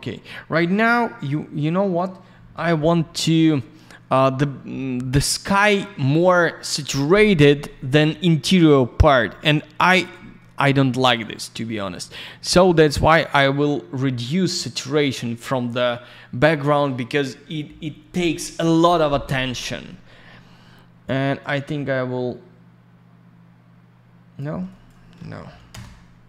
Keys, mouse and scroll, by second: 1.0 middle click, 3.2 middle click, 8.8-9.2 scroll down 1, 9.2 middle click, 9.7 scroll up 1, 10.1 middle click, 10.7-11.0 scroll up 1, 11.0 click, 11.1 click, 11.3 double click, 12.9 click, 21.4 click, 24.6 click, 24.8 click, 25.4 0, 25.7 Return.